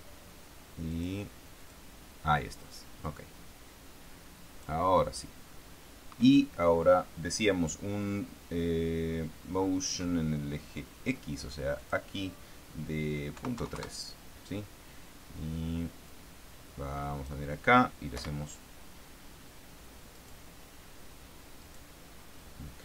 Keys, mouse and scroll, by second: 1.2 click, 1.9 click, 3.4-5.2 drag, 12.1 click, 13.7 KP_Decimal, 13.9 KP_3, 14.1 KP_Enter, 16.4-17.8 drag, 18.5 p, 20.5 right click, 22.0 right click.